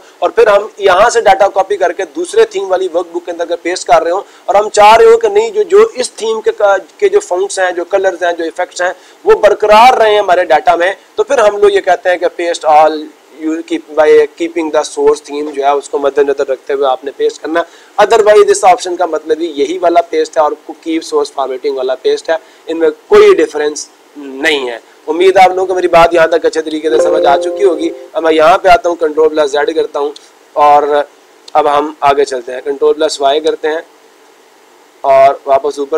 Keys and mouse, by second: 28.0-29.1 drag.